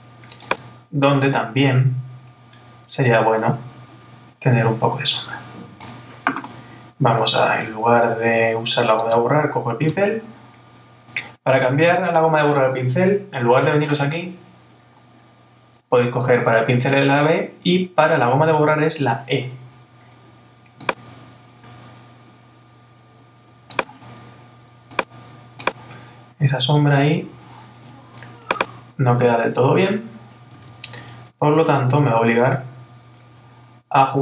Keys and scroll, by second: 30.7 super+z, 31.5 alt+super+z.